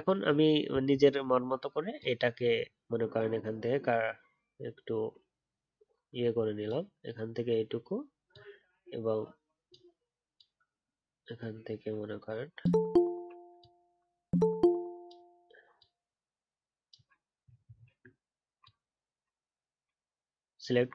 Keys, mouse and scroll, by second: 1.0 alt+scroll up 1, 17.6-19.5 alt+scroll up 1.